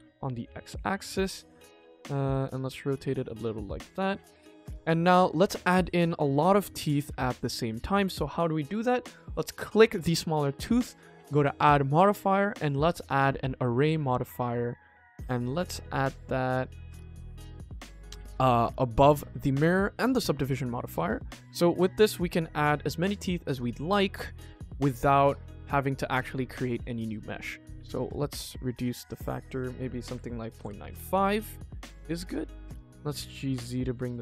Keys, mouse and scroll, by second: 0.7 middle click, 1.6 r, 3.0 click, 3.3 middle click, 4.3 click, 4.4 KP_1, 5.2 scroll down 1, 5.5 ctrl+s, 5.7 middle click, 6.8 click, 7.2 scroll up 1, 7.9 click, 8.4 shift+middle click, 8.8 ctrl+s, 11.4-12.9 drag, 13.8-16.0 drag, 16.8-17.1 drag, 21.4 click, 21.6 click, 21.8 click, 21.9 click, 24.3-27.0 middle drag, 27.9 click, 29.1-30.6 drag, 31.4 click, 31.8 middle click, 32.5 click, 32.8 g, 34.1-34.2 middle drag.